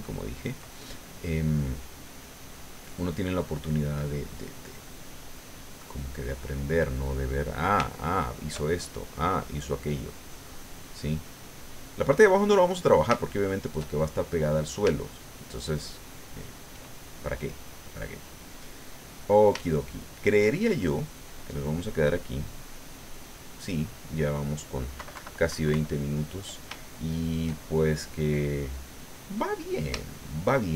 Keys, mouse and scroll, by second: 0.8 ctrl+middle click, 1.8 middle click, 3.6-4.7 middle drag, 4.9-6.9 drag, 7.9 shift+middle click, 8.8-11.7 shift+drag, 11.8 click, 12.7 click, 14.2 shift+click, 15.0 shift+click, 15.9 shift+middle click, 16.8 shift+middle click, 19.8 shift+middle click, 22.2 click, 23.0 click, 25.0 KP_Subtract, 26.8 shift+click, 27.6-30.1 shift+drag, 29.7-30.7 shift+middle drag.